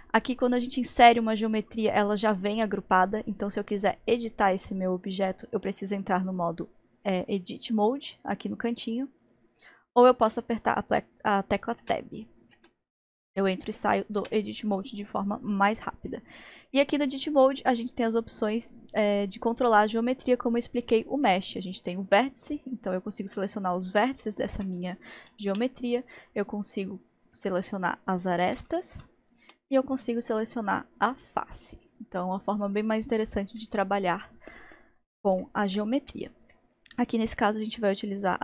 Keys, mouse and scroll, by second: 3.4 click, 4.7-7.1 middle drag, 7.1-10.1 drag, 11.8 Tab, 12.6 Tab, 13.2 Tab, 13.7 middle click, 14.2 Tab, 17.9 click, 22.9 click, 24.8 g, 26.6 click, 27.7 click, 27.8 click, 28.6 g, 30.5 click, 31.2 click, 31.3 click, 32.6 click, 33.6-38.2 middle drag, 38.2 click.